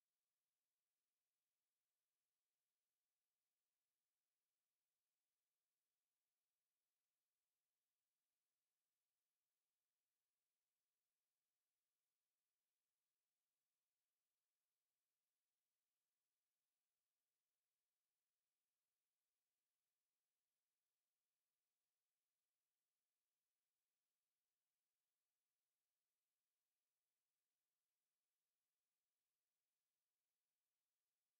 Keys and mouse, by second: 10.0 alt+middle click, 10.9 alt+middle click, 12.3 ctrl+click, 16.2 click, 16.7 alt+middle click, 17.7 click, 18.8 shift+click, 19.0 shift+click, 19.7 alt+click, 21.2 alt+click, 21.5 alt+right click, 23.3 ctrl+e, 24.3 alt+click, 24.7 alt+right click, 25.9 ctrl+click, 28.6 alt+click, 29.0 alt+right click, 30.3 g.